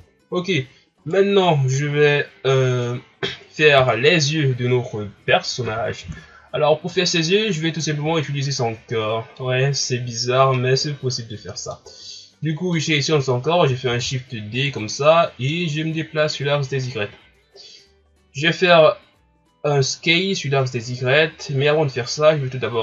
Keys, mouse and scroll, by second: 0.0 KP_1, 1.0 right click, 1.5-3.9 shift+scroll up 1, 7.3 scroll up 3, 7.8 scroll down 1, 8.3-11.8 middle drag, 11.8 scroll down 1, 12.7-13.9 middle drag, 13.9 shift+d, 14.9-16.2 middle drag, 16.2 click, 17.1 ctrl+scroll down 4, 17.5-19.9 scroll up 1.